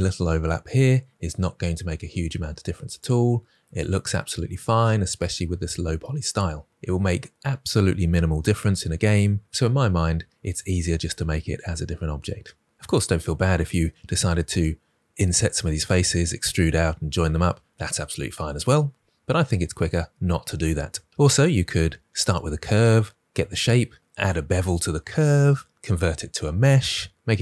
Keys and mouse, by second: 2.9 click.